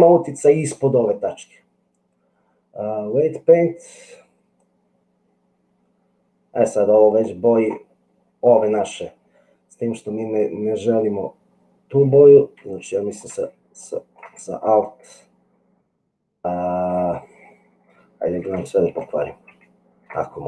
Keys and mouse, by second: 4.7-7.7 drag, 12.8 shift+click, 13.8 ctrl+click, 14.7-16.9 alt+drag, 18.3 ctrl+z, 18.9 ctrl+z.